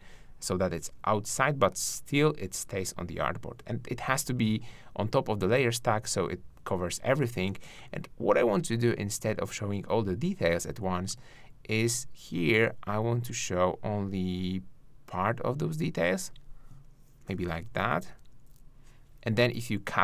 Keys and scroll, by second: 17.1 shift+Down.